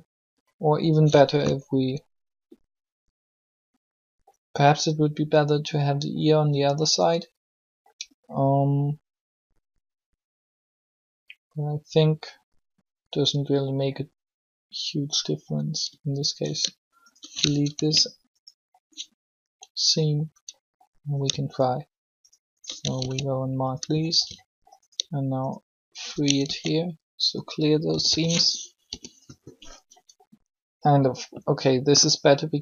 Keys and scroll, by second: 18.9 ctrl+e, 22.8 ctrl+shift+e, 24.2 ctrl+e, 26.3 ctrl+shift+e, 27.9-28.6 typing.